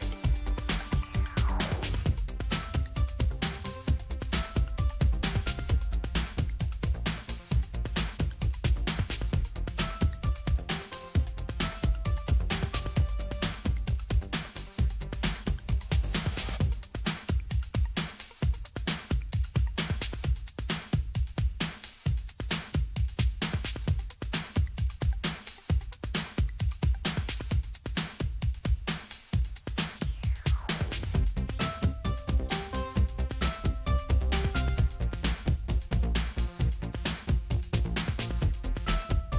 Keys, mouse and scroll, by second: 4.2 click, 7.1 click, 8.6 click, 10.8 click, 13.7 click, 18.3 click, 20.4 click, 23.1 click, 24.3 click, 26.4 click, 28.2 click, 31.7 click, 33.9 right click, 35.4 click.